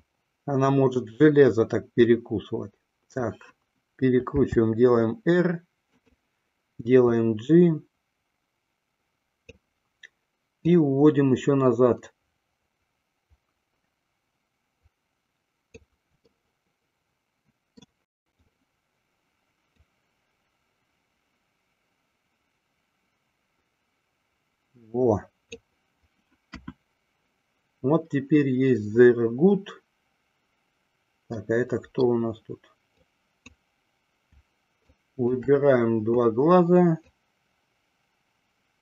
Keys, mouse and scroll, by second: 0.2-3.9 drag, 4.9 r, 7.3-9.9 drag, 11.0-16.2 drag, 16.6-18.2 middle drag, 19.8-25.7 drag, 26.7 KP_1, 31.5-32.2 middle drag, 33.1 click, 34.9 shift+click, 37.0-38.8 drag.